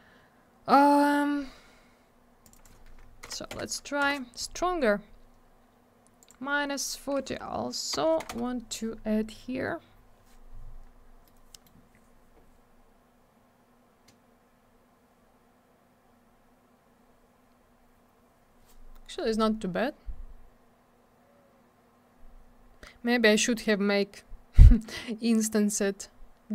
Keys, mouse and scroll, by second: 2.4 click, 2.5 click, 2.5 click, 2.6 click, 3.3 4, 4.0 Return, 6.2 click, 6.3 click, 7.3 -, 7.9 BackSpace, 8.2 4, 8.3 Return, 10.9 scroll up 1, 11.3 middle click, 12.6-13.8 scroll up 1, 14.6-15.1 scroll down 1, 19.6 scroll up 1, 20.0 scroll down 1.